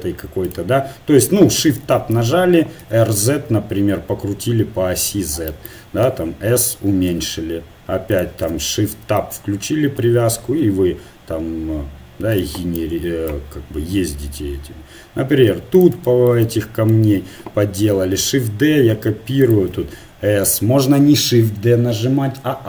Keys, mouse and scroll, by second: 1.8 shift+Tab, 2.8 r, 6.1 s, 7.4 g, 9.2 shift+Tab, 10.0 f, 10.4 g, 12.8-14.7 drag, 16.4 click, 18.0 shift+d, 19.8 s.